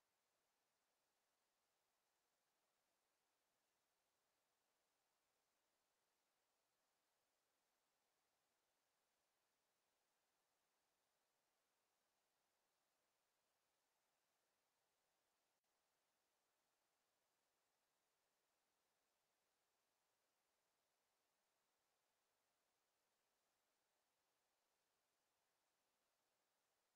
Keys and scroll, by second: 21.2 Escape.